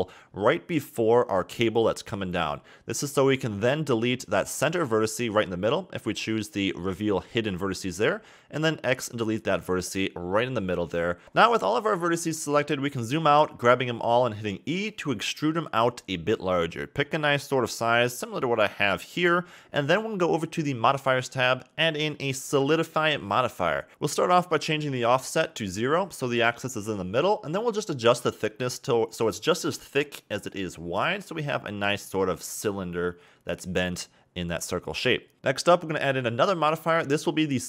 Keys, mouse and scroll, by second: 0.8 g, 6.1 click, 8.9 click, 9.0 x, 10.6 click, 11.1-12.7 scroll down 16, 12.7 shift+middle click, 13.2 scroll down 3, 13.4-14.1 scroll up 3, 14.6 e, 19.6-21.5 middle drag, 21.5 click, 24.6-31.4 drag, 31.4-32.3 middle drag, 32.3 KP_1, 32.6-33.5 scroll up 2, 33.5 KP_3, 34.6-36.2 drag, 36.2 KP_1.